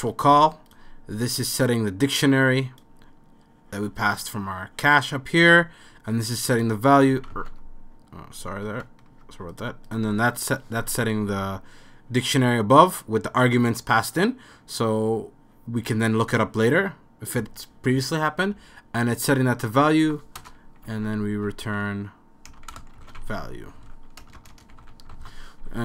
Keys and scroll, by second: 7.4 super+z, 7.4 super+x, 9.4 super+z, 20.4 Return, 20.6-25.3 typing.